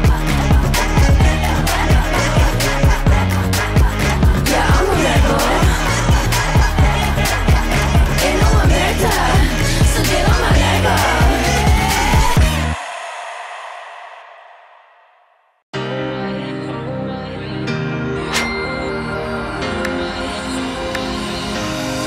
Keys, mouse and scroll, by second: 0.7 click, 5.2-6.5 typing, 6.0 click.